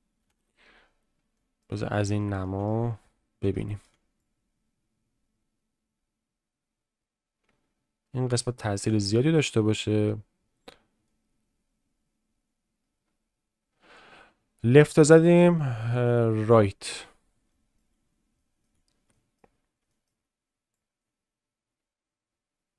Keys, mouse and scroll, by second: 0.3 ctrl+KP_7, 1.3 shift+middle click, 2.2 shift+middle click, 3.5 shift+middle click, 4.2-8.9 drag, 16.5 click, 17.5 shift+middle click, 18.4 shift+middle click, 19.1 shift+middle click, 19.8 shift+middle click, 20.7-22.7 drag.